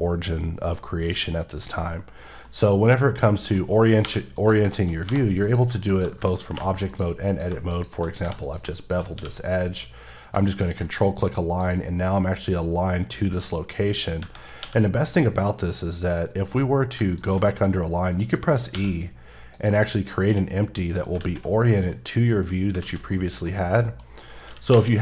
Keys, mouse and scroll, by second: 2.5 middle click, 3.5 middle click, 4.0 3, 4.4 click, 5.0 2, 5.4 click, 6.5 b, 6.9 click, 7.3 click, 7.7 click, 8.2 3, 8.4 click, 10.6 click, 11.9 scroll up 3, 13.3-14.1 scroll down 3, 14.6 q, 17.0 q, 17.2 ctrl+click, 18.7 e, 19.5 click, 19.8-20.2 scroll down 3, 20.2 middle click, 21.2 alt+z, 21.4 middle click, 22.8 z, 23.1 middle click, 23.8 middle click, 24.7 KP_1.